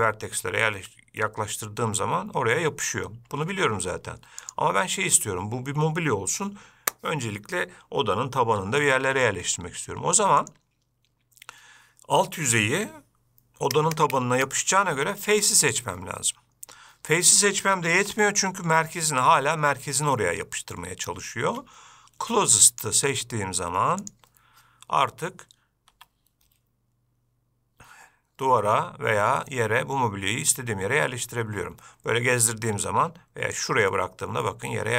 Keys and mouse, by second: 4.6-5.1 drag, 10.6-17.1 drag, 18.1 g, 23.0-24.5 drag, 26.1 g, 34.1-34.9 middle drag.